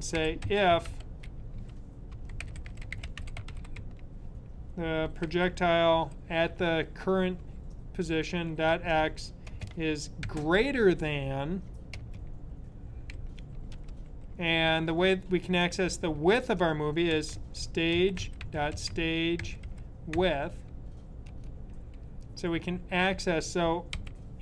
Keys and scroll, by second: 0.1 i, 2.0-5.8 typing, 8.0-8.8 typing, 10.2 typing, 13.1-13.8 typing, 16.8-20.5 typing, 23.6-24.4 typing.